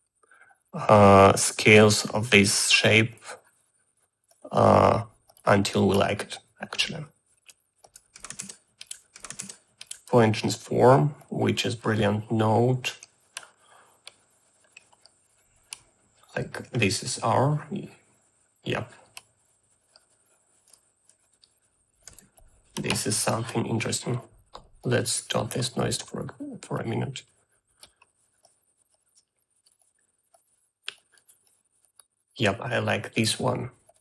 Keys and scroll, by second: 9.0-9.8 typing, 22.5 1.